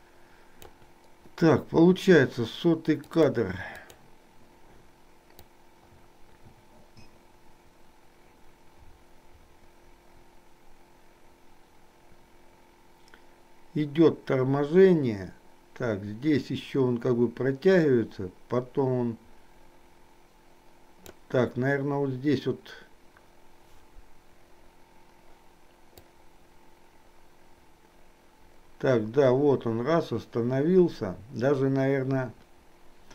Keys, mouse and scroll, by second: 3.1 click, 4.0 click, 5.6-21.2 drag, 26.1-33.1 drag.